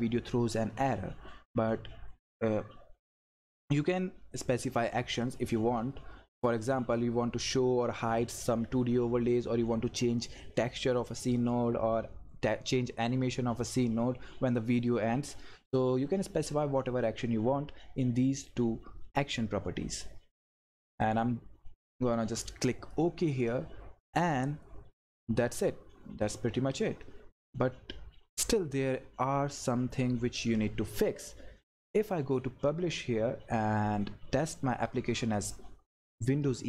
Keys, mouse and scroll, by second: 21.0 click, 21.0-25.4 drag, 31.9 click, 34.4 click.